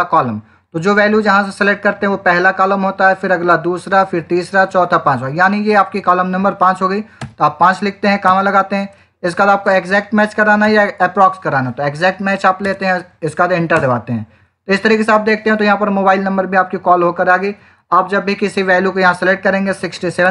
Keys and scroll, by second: 7.1 5, 8.1 /, 9.5 Down, 10.6 Up, 11.5 Down, 13.6 Return, 14.6 Up, 17.3 Left, 19.2 6, 19.5 7, 20.1 Return.